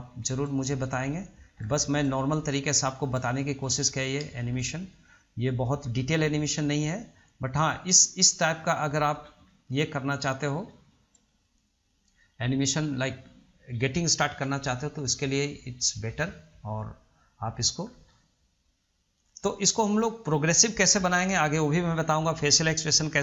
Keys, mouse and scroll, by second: 1.8 scroll down 2, 2.0-3.3 shift+middle drag, 3.3-3.6 scroll down 1, 3.6-6.7 shift+middle drag, 6.7-8.6 drag, 8.6-9.4 middle drag, 9.4 scroll up 1, 9.7-12.1 shift+middle drag, 12.1-15.1 drag, 17.2 click, 17.7 click, 18.0 scroll down 1, 18.3-19.8 middle drag, 19.8 scroll up 1, 20.1-21.4 middle drag, 21.4 scroll down 1, 21.6-22.1 middle drag, 22.1-22.9 scroll up 4, 22.9-23.2 shift+middle drag.